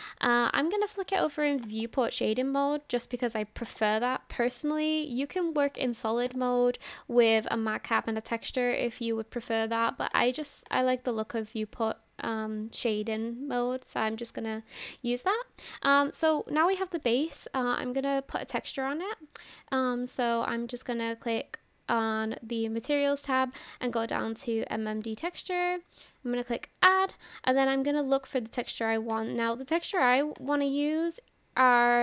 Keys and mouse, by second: 2.3 drag, 3.6 click, 5.7 click, 6.3-10.3 drag, 10.7 click, 19.8 click.